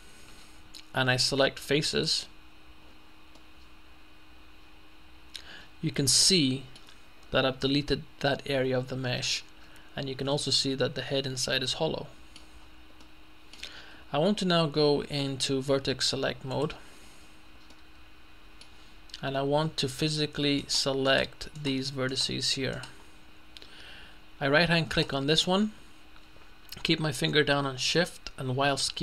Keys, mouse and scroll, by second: 2.2 click, 3.4-7.1 middle drag, 7.1-7.9 scroll down 1, 7.9-9.8 middle drag, 9.8-10.4 scroll up 1, 10.4 middle click, 10.6-11.1 scroll up 1, 12.6-13.6 scroll down 2, 13.1 middle click, 16.6 click, 17.2 middle click, 17.4-18.1 scroll up 2, 17.8 middle click, 20.6-22.2 right drag, 22.8 middle click, 22.8 right click, 25.0 right click.